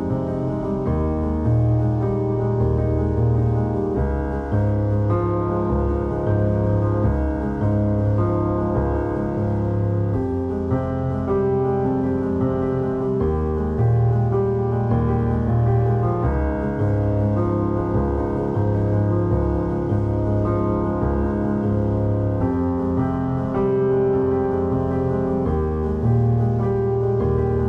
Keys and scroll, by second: 1.5 Tab, 3.1 Tab, 3.2 a, 3.8 3, 4.5 ctrl+shift+r, 4.6 Escape, 4.8 3, 5.6 x, 6.4 shift+], 14.4 r, 18.5 Tab, 18.6 2, 20.1 x, 21.4 x, 22.7 2, 23.6 shift+q, 24.5 Tab, 24.8 alt+shift+z, 25.4 Tab, 25.9 ctrl+r, 26.3 alt+s, 27.4 ctrl+b.